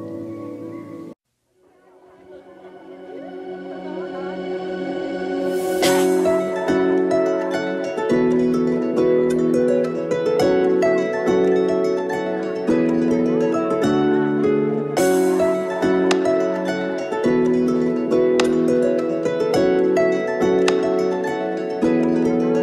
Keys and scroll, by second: 4.4 Tab, 7.6 typing, 7.8 Return, 14.3 typing, 14.5 Return, 18.7 Tab.